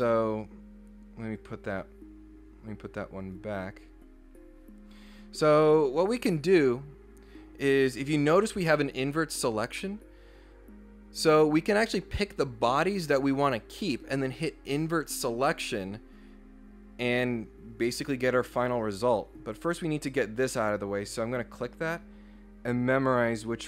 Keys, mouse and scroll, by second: 1.3 click, 3.2 click, 5.0 scroll up 1, 21.2 click, 23.0 click.